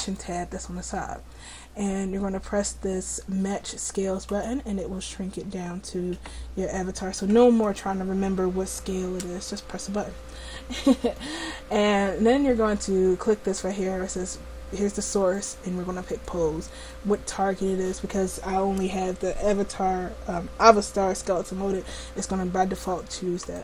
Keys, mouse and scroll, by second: 0.0-6.3 drag, 6.3 middle click, 7.7-11.4 drag, 15.4-23.6 drag.